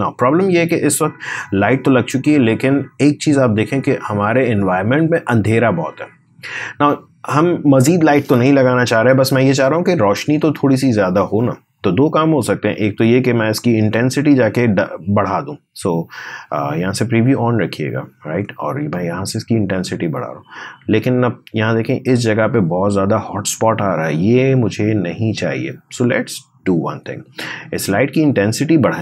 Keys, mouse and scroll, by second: 12.3 click, 18.2-25.8 drag, 25.8-29.0 drag.